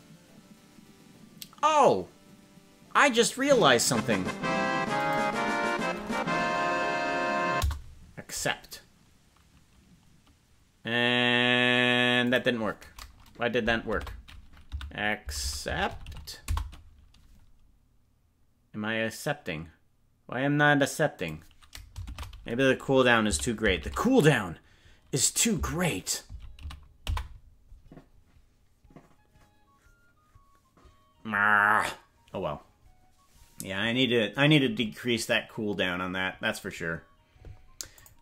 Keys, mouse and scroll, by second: 37.9 click.